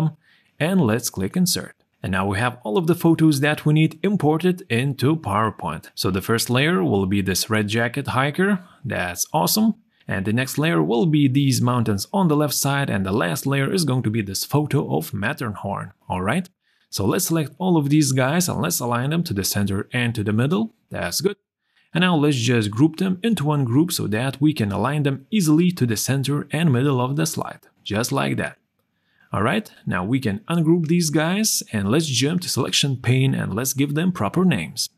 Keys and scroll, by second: 17.0 ctrl+a, 24.5 ctrl+g.